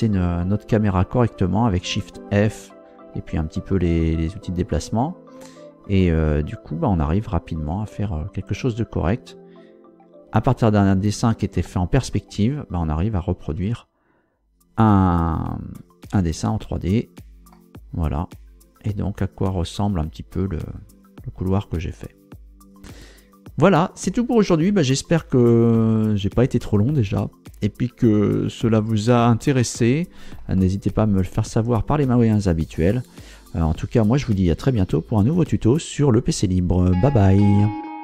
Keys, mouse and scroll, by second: 10.3 Tab, 13.3 Tab, 15.1 z, 17.5-24.2 middle drag, 30.6-32.4 shift+middle drag.